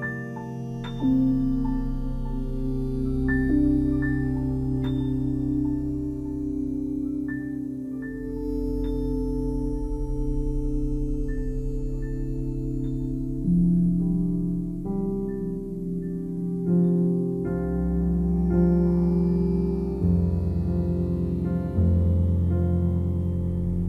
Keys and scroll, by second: 22.8 5, 23.3 Return.